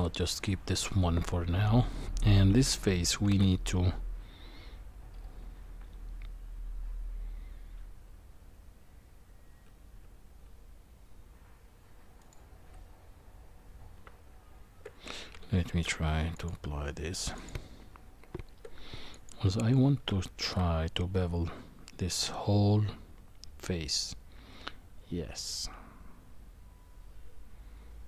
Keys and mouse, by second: 3.3 ctrl+b, 14.0 Tab, 15.7 ctrl+a, 17.3 click, 17.8 Tab, 19.1 click, 20.4 ctrl+b.